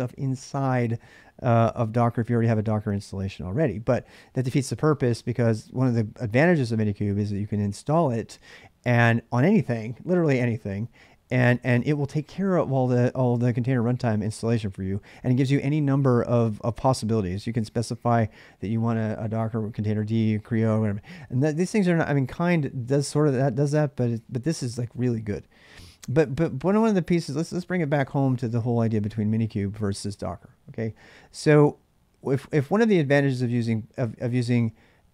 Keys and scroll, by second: 28.9 ctrl+a.